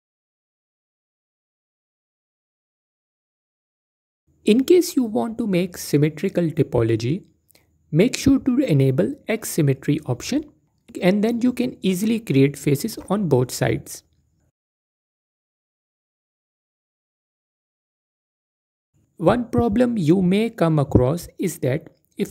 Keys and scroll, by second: 0.1 a, 0.8 a, 2.9 a, 4.8 typing.